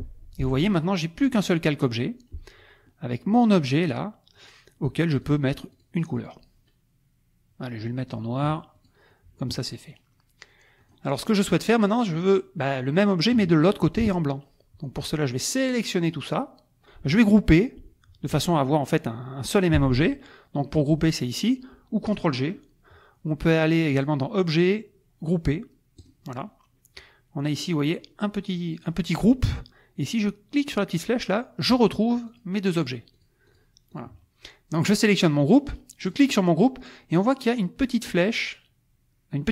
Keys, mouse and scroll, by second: 5.2 click, 5.7 click, 6.1 click, 8.7 click, 10.8 click, 11.2 click, 11.8 click, 15.1 click, 23.9 click, 26.0 click, 30.9 click, 31.7 click, 32.3 click, 32.7 click, 33.1 click, 33.7 click, 33.9 click, 36.1 click.